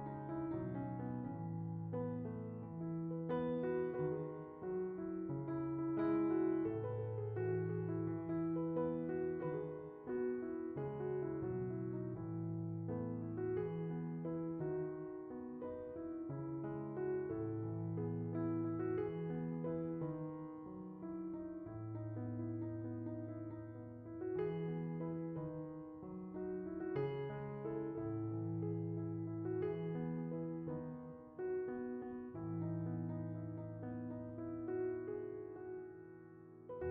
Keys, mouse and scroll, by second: 0.0-1.8 scroll up 3, 6.5-8.2 drag, 12.5-14.7 drag, 15.9-20.3 drag, 21.9 shift+middle click, 22.2 scroll down 3, 23.2-26.7 drag, 26.7 right click, 27.3-28.8 drag, 29.9 scroll up 1, 30.2-31.3 middle drag, 31.3 click, 32.4-33.4 middle drag, 33.4 shift+d, 35.3 click.